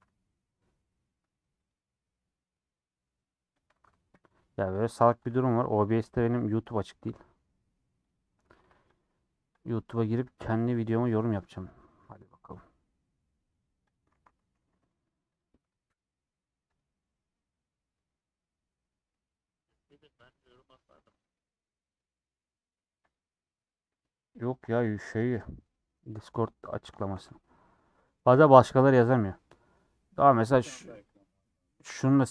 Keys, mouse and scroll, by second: 4.8 middle click, 6.5-25.4 middle drag, 25.5 middle click, 25.9 scroll up 1, 25.9 scroll down 2, 26.0 middle click, 26.4-26.7 scroll up 2, 26.7 middle click, 27.3 Tab, 27.5 scroll up 1, 27.5 middle click, 28.3 Tab, 28.6 middle click, 29.2 click, 29.6-31.1 middle drag, 31.1 click, 31.4-32.3 middle drag.